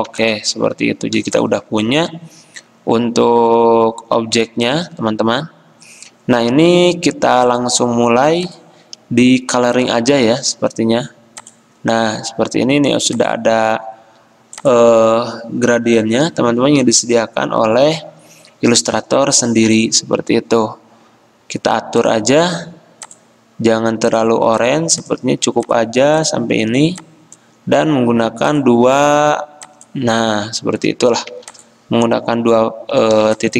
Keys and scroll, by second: 0.2 v, 31.4 v, 33.3 space.